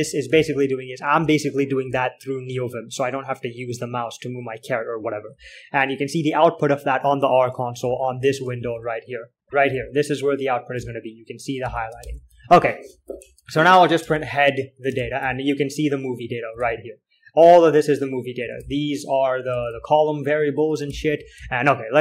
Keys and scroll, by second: 0.0-0.2 typing, 0.2 Return, 0.7 alt+x, 2.4-3.4 typing, 8.1 ctrl+;, 9.1-22.0 typing, 15.3 ctrl+l, 21.2 ctrl+h.